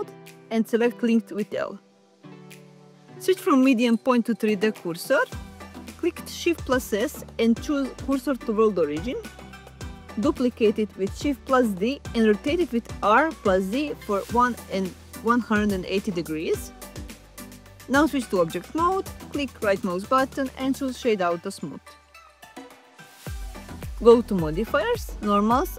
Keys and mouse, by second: 0.9 click, 1.7 l, 4.1-5.2 drag, 7.0 shift+s, 9.7 shift+d, 14.3 r, 14.8 1, 15.7 8, 16.0 0, 17.3 z, 17.9 click, 21.4 Tab, 22.0-23.8 right drag, 25.2 click.